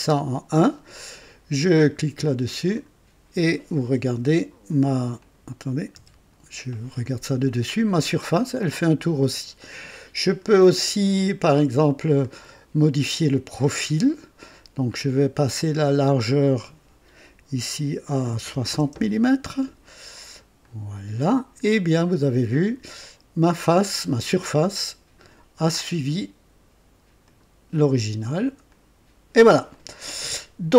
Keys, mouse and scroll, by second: 2.7 click, 4.0 KP_2, 5.2 click, 6.0 KP_2, 7.7-9.5 drag, 9.6 click, 11.5 click, 12.2-13.1 drag, 13.6 click, 14.9-15.2 scroll up 1, 15.9 click, 18.4-18.9 typing, 20.6 click, 21.6-24.2 drag, 22.5 typing, 27.2 click, 28.7 click, 29.7-30.7 drag.